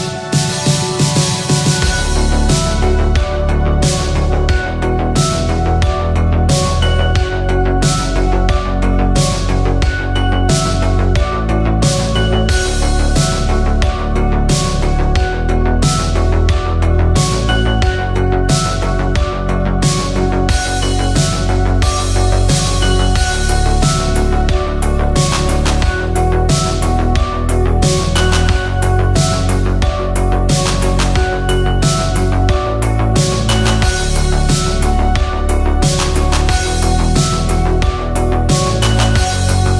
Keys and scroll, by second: 15.0 w, 23.7 alt+Tab, 24.1 space, 35.9-37.5 typing.